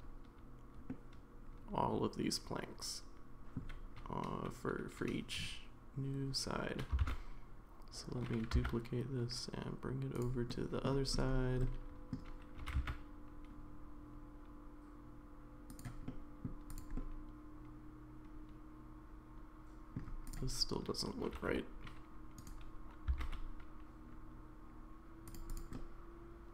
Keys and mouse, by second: 1.0-3.5 middle drag, 7.0 shift+d, 10.5-10.9 middle drag, 11.6-12.1 middle drag, 12.6 g, 16.1 middle click, 16.9-20.0 middle drag, 21.2 g, 23.1 s, 25.7-26.5 middle drag.